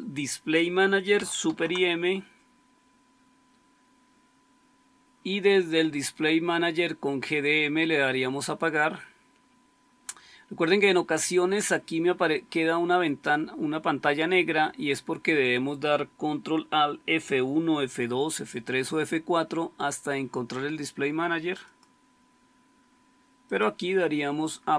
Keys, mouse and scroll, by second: 1.4 super+m.